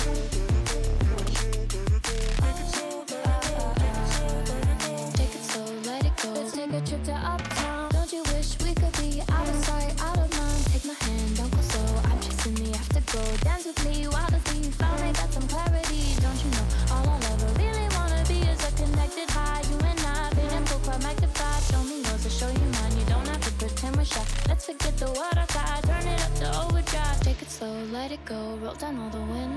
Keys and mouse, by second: 1.9 click, 2.5 shift+click, 2.9 z, 4.4 z, 5.1 click, 7.0 z, 7.7 z, 8.6 z, 9.4 click, 10.3 r, 12.7 click, 12.9 s, 13.7 z, 14.3 s, 16.4 click, 16.8 s, 18.6 g, 19.7 x, 20.8 shift+drag, 21.3 click, 21.7 shift+click, 22.4 click, 22.8 click, 23.0 Tab, 24.2 shift+click, 24.6 g, 25.9 z, 26.7 click, 27.3 z, 28.1 g.